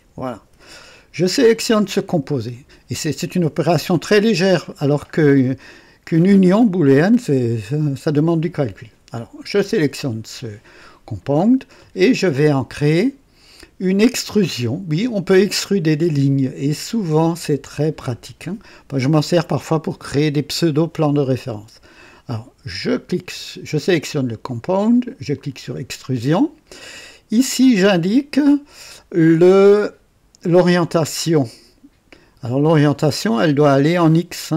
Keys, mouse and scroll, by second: 1.4 click, 25.3 click.